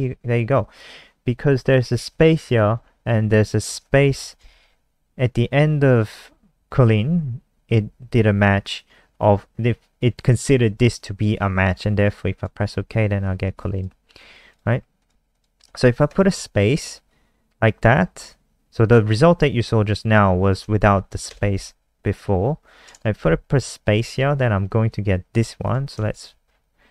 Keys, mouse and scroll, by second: 4.0 shift+Right, 12.3 click, 13.4 alt+click, 14.5 click, 15.3 click, 16.0 shift+Right, 21.3 BackSpace, 23.5 ctrl+s, 24.8 click, 25.9 F5, 26.6 alt+click.